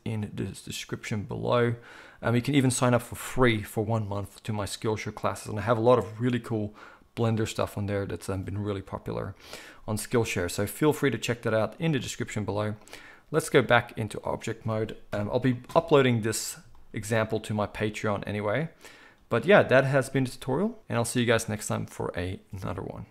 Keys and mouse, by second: 12.9 click, 13.4 middle click, 13.8-23.1 drag, 15.1 KP_1.